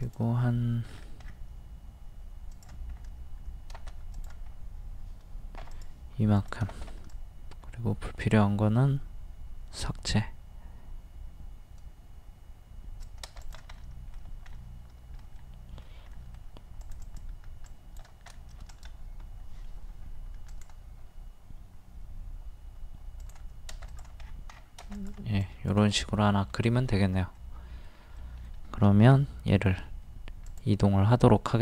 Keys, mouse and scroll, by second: 0.0 click, 0.9 scroll down 1, 2.5 click, 3.0 scroll up 1, 4.2 click, 4.5-4.8 scroll up 1, 5.6 p, 5.7-13.4 drag, 6.9 e, 13.8-15.4 middle drag, 16.8-18.3 drag, 18.7 right click, 20.5 click, 24.2 scroll down 1, 25.0 click, 26.0 middle click, 27.3 scroll up 1, 27.4 middle click, 29.1 m, 30.4 click.